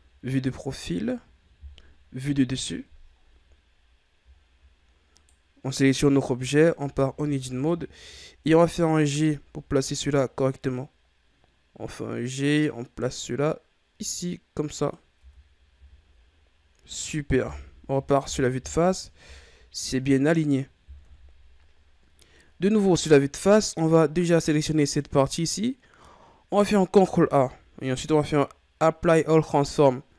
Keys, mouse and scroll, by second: 0.8-2.1 shift+scroll down 3, 2.1 KP_7, 3.0-4.2 ctrl+scroll up 13, 4.2-5.0 ctrl+scroll down 3, 5.0 right click, 6.3 Tab, 6.7 a, 7.0 a, 7.8-8.5 shift+scroll up 1, 8.5 g, 15.1 Tab, 15.6 a, 16.1-17.4 scroll down 4, 17.4 KP_1, 19.1 KP_3, 20.9 KP_1, 21.9-23.1 scroll down 3, 23.1-24.6 scroll up 1, 24.6 right click, 26.9 ctrl+a.